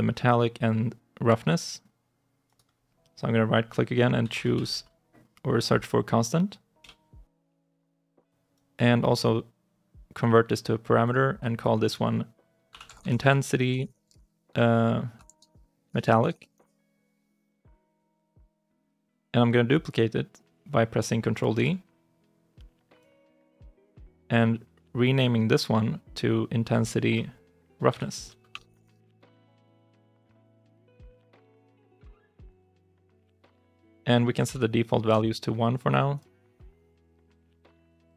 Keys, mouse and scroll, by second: 2.3 right click, 3.8-5.0 typing, 6.7 Return, 8.4 right click, 12.3-16.8 typing, 21.4 ctrl+d, 21.5 typing, 28.4-31.0 typing, 34.3 1, 35.0 Return, 37.3 1.